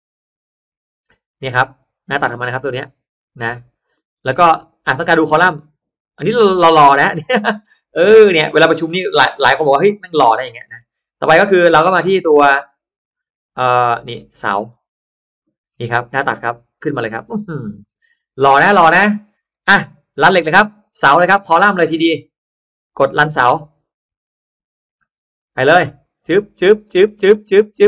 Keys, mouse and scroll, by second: 0.4 scroll down 1, 0.5 scroll up 1, 1.6 right click, 2.6 click, 3.4 middle click, 3.8 middle click, 4.4 click, 4.4-5.2 scroll up 2, 5.2 click, 5.3 space, 6.8 click, 7.3 middle click, 7.9 middle click, 8.2 space, 8.4 drag, 8.7 scroll up 1, 9.6-9.9 scroll up 1, 9.6-10.8 middle drag, 10.8 scroll down 1, 14.4 click, 15.5-16.3 scroll up 1, 16.0 middle click, 16.7-17.3 scroll down 1, 17.5 scroll down 1, 17.7 middle click, 18.1 scroll down 1, 18.5 middle click, 18.5-19.4 scroll up 2, 23.2 click, 25.3 click.